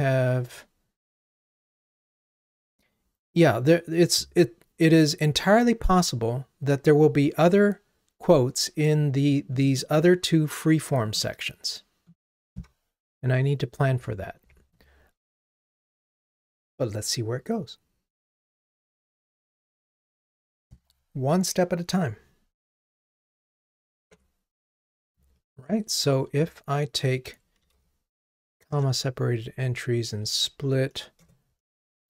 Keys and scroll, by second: 24.2 ctrl+Tab, 28.8 Return.